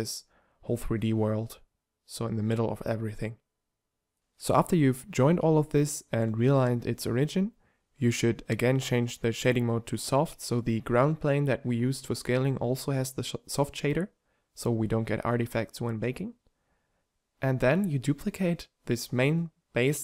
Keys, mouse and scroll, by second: 4.9 middle click, 5.2-7.7 drag, 5.2 g, 8.0-9.4 drag, 8.8 Tab, 10.8 g, 12.2 Tab, 13.2 u, 15.4 Tab, 17.1 m.